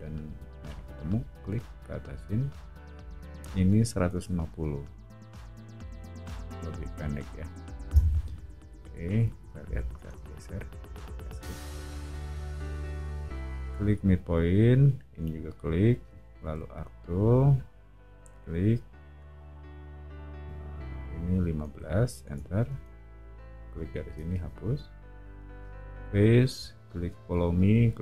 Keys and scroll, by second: 3.8-4.7 typing, 5.9 0, 7.9 Return, 9.2 o, 11.0 Escape, 16.4 a, 21.4-22.7 typing, 24.3 BackSpace.